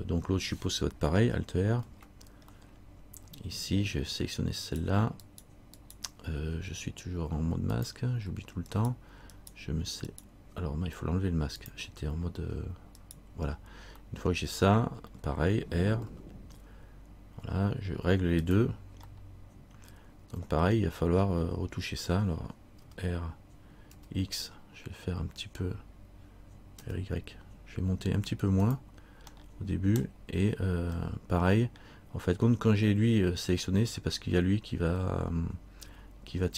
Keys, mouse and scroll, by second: 2.0 alt+r, 2.8 middle click, 4.8 right click, 6.0 right click, 7.9 click, 8.9 right click, 11.8 click, 13.2 right click, 14.3 middle click, 16.3 r, 19.4 middle click, 21.2-21.6 scroll up 1, 22.5 scroll up 2, 23.0 r, 29.5 middle click, 31.2 middle click.